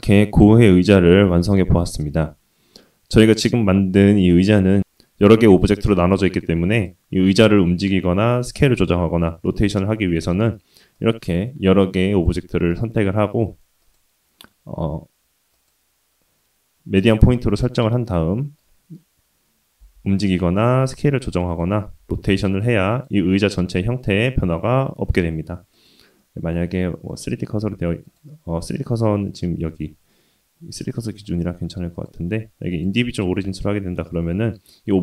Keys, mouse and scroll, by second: 6.7 click, 7.5-8.4 drag, 10.3 click, 10.9-12.2 drag, 13.8-15.0 drag, 15.5-17.1 drag, 17.8-18.5 middle drag, 19.9 g, 20.8 s, 21.8 r, 24.1-24.7 middle drag, 25.7-27.2 drag, 27.7 s, 29.2 middle click, 31.2 middle drag, 31.9-32.8 drag, 33.4 s.